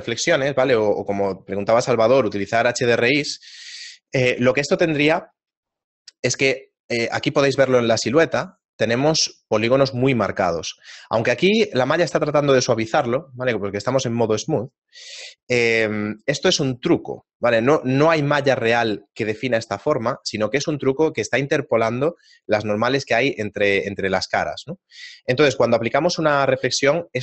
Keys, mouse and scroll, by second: 7.4-7.8 scroll up 2, 10.6 scroll down 1, 10.6-11.4 scroll down 2, 14.0 click.